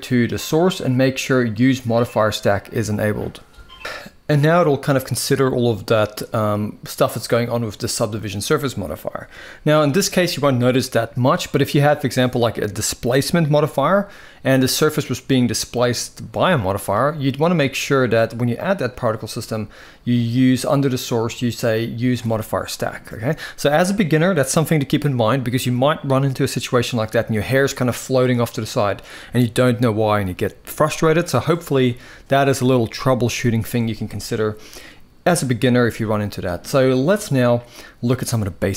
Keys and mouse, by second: 0.1 click, 1.6 click, 6.8 click, 18.4 click.